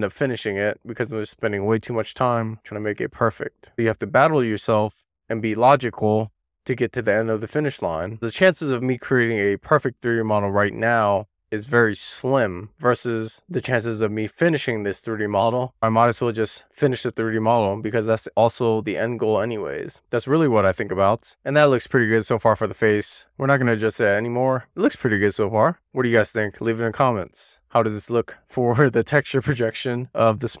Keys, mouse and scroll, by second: 0.2 middle click, 0.5 scroll up 2, 0.6 middle click, 1.3 scroll down 2, 1.4 middle click, 1.6 middle click, 2.2-2.8 scroll up 1, 2.8 scroll up 1, 2.9 alt+middle click, 3.1 alt+z, 3.3 click, 5.0 click, 5.7 alt+scroll up 1, 6.0 alt+z, 6.2 click, 6.9 super+z, 7.2 click, 7.4-8.1 scroll up 4, 8.1 super+z, 8.7 click, 8.8-9.2 scroll up 2, 9.2-9.6 scroll down 4, 9.6 scroll up 1, 10.0-10.5 scroll down 1, 10.5 click, 12.1 shift+middle click, 12.7 scroll down 1, 12.8 middle click, 13.2-13.7 scroll up 2, 13.7 scroll down 2, 13.8 middle click, 14.5 middle click, 14.9 scroll down 2, 15.0 middle click, 15.3 middle click, 15.7 click, 15.8 middle click, 16.2 click, 17.8-18.3 scroll down 3, 18.0 middle click, 18.3 alt+middle click, 19.0-19.8 scroll up 2, 19.8-20.1 scroll up 2, 20.1 click, 20.6 alt+z, 20.7 click, 20.8 alt+z, 22.5 click, 23.4 super+z, 23.7 click, 24.1 click, 25.3 middle click, 25.8 super+z, 25.9 middle click, 26.8 click, 27.3 middle click, 28.0 middle click, 28.4 middle click, 28.6-28.9 scroll down 2, 29.0 click, 29.1 middle click, 29.9 scroll down 2, 30.1 scroll up 1, 30.2 middle click, 30.3-30.6 scroll down 3, 30.4 shift+middle click.